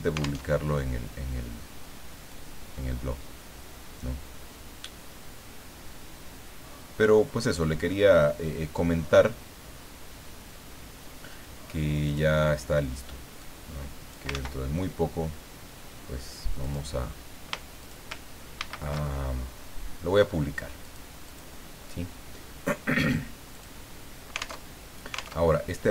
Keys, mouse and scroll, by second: 0.4 alt+Tab, 2.3-7.8 drag, 7.9-9.3 drag, 7.9-9.3 middle drag, 12.1 click, 13.4 click, 14.3 ctrl+z, 16.6 click, 17.8 shift+click, 18.6 ctrl+shift+a, 20.8 click, 21.3 click, 23.5 click, 24.6 alt+Tab, 25.3 alt+Tab.